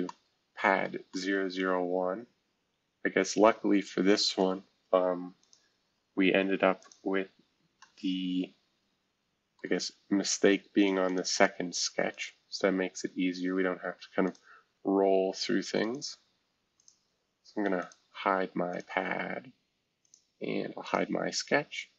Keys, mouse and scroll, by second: 0.8 middle click, 4.4 middle click, 5.4-6.8 drag, 5.8 space, 7.8-11.0 middle drag, 7.8-8.6 scroll up 1, 8.6-9.6 scroll up 1, 11.0-13.7 drag, 14.2-15.8 drag, 15.9 click, 17.8 click, 18.7 click, 20.0 click, 20.8 click.